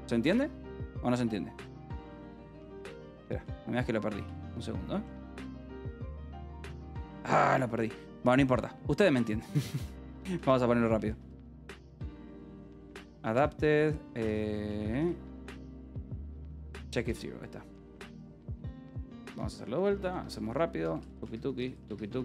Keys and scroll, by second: 1.7 Escape, 1.9-4.1 typing, 5.7 shift+p, 5.7 BackSpace, 6.8 shift+p, 7.2 u, 8.3-13.3 typing, 14.6-16.8 typing, 17.5 ctrl+g, 18.3 Escape, 18.4-22.2 typing.